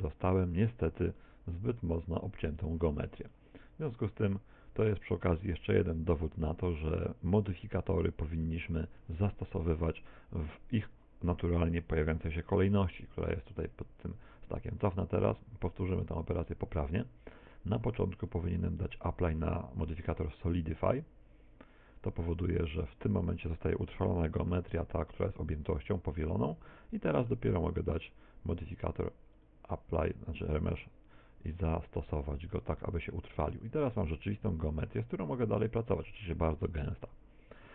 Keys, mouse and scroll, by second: 1.3 middle click, 2.3 scroll down 4, 2.7 shift+middle click, 3.3 middle click, 4.3 middle click, 8.5 middle click, 9.3 shift+middle click, 13.8 ctrl+z, 16.2 ctrl+z, 18.5 click, 20.7 click, 25.3 middle click, 29.5 click, 32.1 middle click, 33.0 shift+middle click, 34.5 Tab, 35.6 middle click.